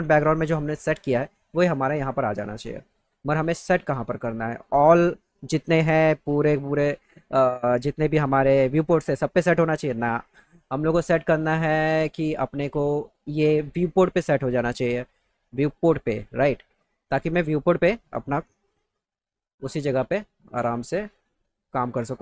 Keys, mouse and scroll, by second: 11.8 click, 18.6 click.